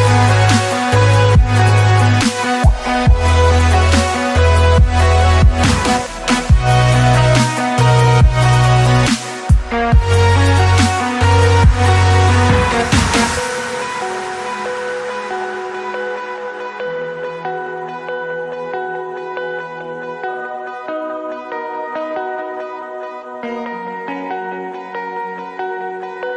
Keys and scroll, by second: 2.7-5.6 typing, 7.1 shift+f, 7.7 shift+f, 9.2 shift+Escape, 14.3 Return, 19.0 Tab, 22.1 Right, 24.6 w.